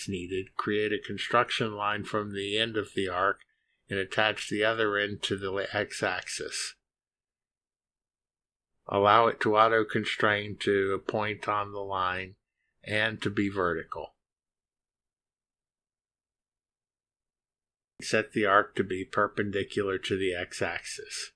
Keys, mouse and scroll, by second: 2.8 click, 4.9 click, 7.9 click, 12.0 click, 13.1 click, 20.8 click.